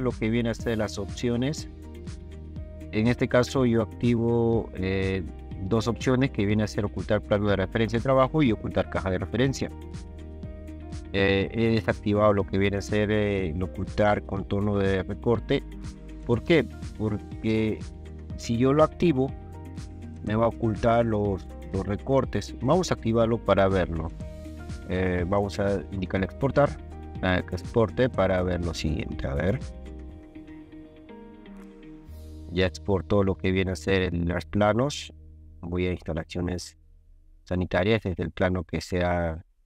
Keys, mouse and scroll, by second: 23.5 click, 26.4 click, 35.2 ctrl+click, 36.7 ctrl+click.